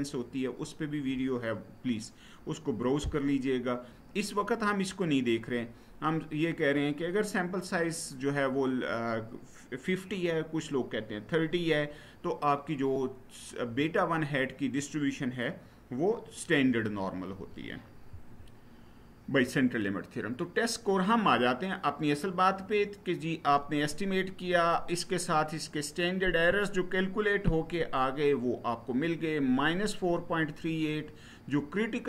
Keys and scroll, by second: 17.9 Right.